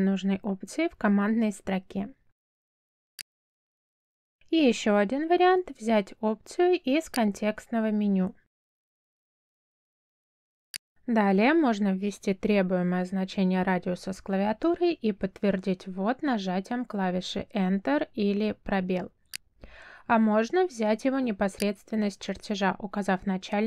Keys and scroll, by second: 3.9 space, 13.3 2, 15.7 Return.